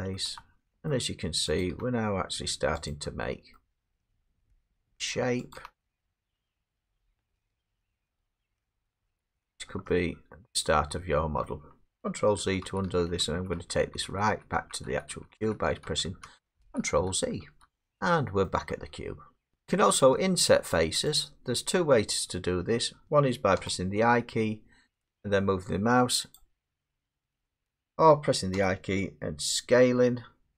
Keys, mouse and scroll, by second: 0.2 middle click, 0.3 e, 0.8 click, 0.9 middle click, 1.6 click, 1.7 e, 2.9 click, 3.3 middle click, 3.6 middle click, 4.1 click, 4.4 e, 5.1 click, 5.6 click, 5.6 e, 6.3 click, 7.5-9.9 middle click, 8.0 click, 8.1 e, 9.0 click, 9.3-9.7 scroll, 11.5 middle click, 12.4 ctrl+z, 12.7 ctrl+z, 12.9 ctrl+z, 13.2 ctrl+z, 13.3 ctrl+z, 13.6 ctrl+z, 13.8 ctrl+z, 14.1 ctrl+z, 14.3 ctrl+z, 14.6 ctrl+z, 14.9 ctrl+z, 15.1 ctrl+z, 15.4 ctrl+z, 15.8 ctrl+z, 16.3 ctrl+z, 16.6 ctrl+z, 17.1 ctrl+z, 17.9 ctrl+z, 17.9 middle click, 18.5 middle click, 18.8 middle click, 18.9 middle click, 19.0 middle click, 19.5 click, 19.6-19.9 scroll down 8, 19.9 middle click, 20.2 middle click, 20.5 middle click, 21.1 click, 23.6 i, 26.4 click, 27.4 ctrl+z, 28.5 i.